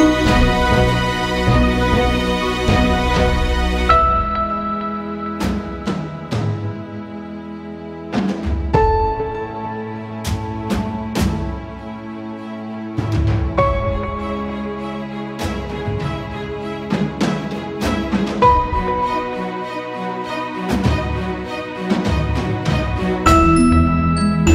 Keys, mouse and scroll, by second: 0.7-2.6 drag, 2.6 click, 5.1 click, 7.5-9.2 drag, 9.2 space, 10.3 click, 15.4 ctrl+c, 15.7 ctrl+f, 16.9 right click, 18.1 click, 21.2 click, 21.4-24.3 shift+drag.